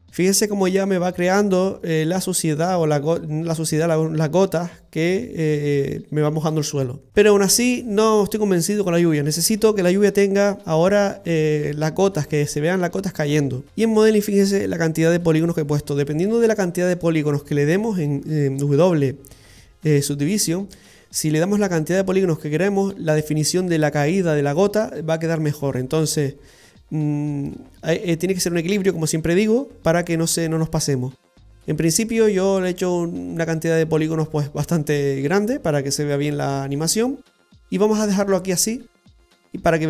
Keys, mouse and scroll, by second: 13.7 click, 13.7 scroll down 2, 14.7 shift+middle click, 15.2-16.0 scroll up 4, 16.0 middle click, 19.0 w, 33.6-34.5 scroll down 1, 34.5 middle click, 37.2 scroll down 1, 37.3 scroll up 2, 38.6 click, 39.2-39.8 scroll down 2.